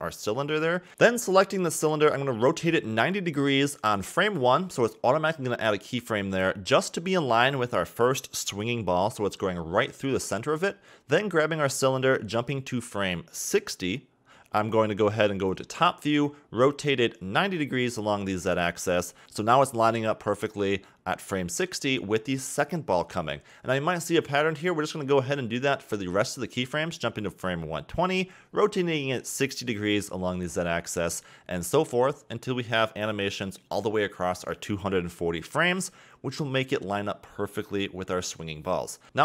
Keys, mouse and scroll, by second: 2.4 KP_Decimal, 3.1 scroll up 4, 3.2 KP_7, 3.7 r, 6.7 scroll down 1, 6.8-8.2 middle drag, 8.2 KP_1, 8.9 KP_3, 9.3-10.7 scroll up 5, 10.7 a, 10.8 a, 11.6 click, 12.8-13.8 scroll down 3, 14.6-16.7 drag, 16.7 Left, 17.5 scroll up 6, 17.7 r, 19.7-20.1 scroll up 1, 20.1-20.7 middle drag, 20.7-22.3 Left, 22.4-23.3 Left, 23.5-25.6 Right, 26.7 click, 27.7 KP_7, 28.8 r, 31.3 click, 31.7 Right, 32.5 r, 34.6 click, 35.5 r, 37.2-38.2 middle drag, 38.2-39.2 drag.